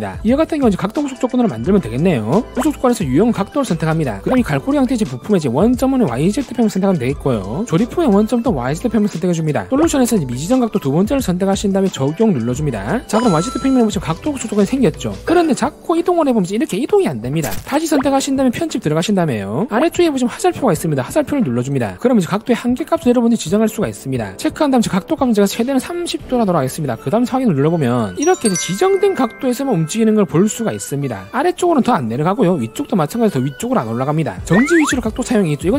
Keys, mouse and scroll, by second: 4.1 click, 7.4 click, 9.5 click, 11.9 click, 12.8 click, 15.6 click, 16.1-17.6 drag, 18.1 click, 19.3 click, 22.0 click, 24.7 click, 25.5 click, 26.2 3, 28.2-34.5 drag.